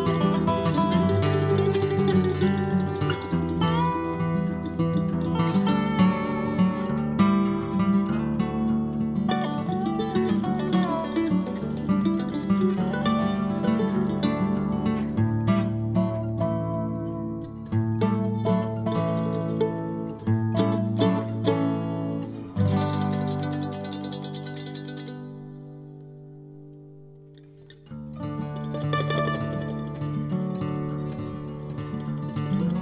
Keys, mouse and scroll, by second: 1.5 scroll down 2, 1.6 middle click, 2.4 click, 3.0-4.4 drag, 4.4 p, 5.6 l, 8.9-10.0 drag, 10.5-12.3 drag, 12.3 p, 13.7 l, 21.4 click, 22.2 click, 22.9 click, 23.4-25.0 drag, 26.8-27.6 scroll up 2, 27.6 click, 28.2 click, 28.6-30.2 drag, 30.2-31.0 scroll down 9, 31.0 click, 31.9 click, 32.7-32.8 middle drag.